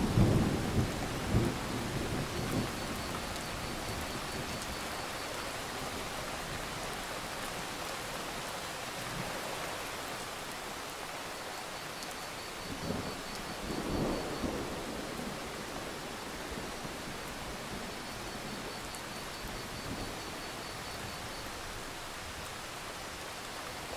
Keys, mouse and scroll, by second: 7.6 alt+scroll up 1, 8.1 click, 11.6-12.2 scroll down 1, 12.2-15.7 drag, 23.3 right click, 23.7-23.9 drag.